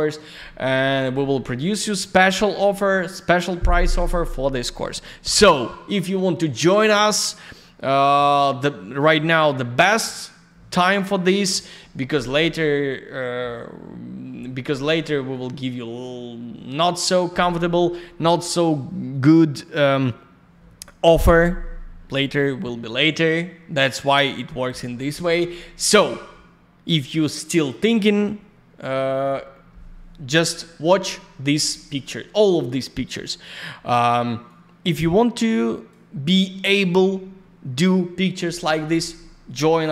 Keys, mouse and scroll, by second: 0.3 click, 4.1 click, 10.0 click, 15.3 click, 31.8 click, 34.4 click.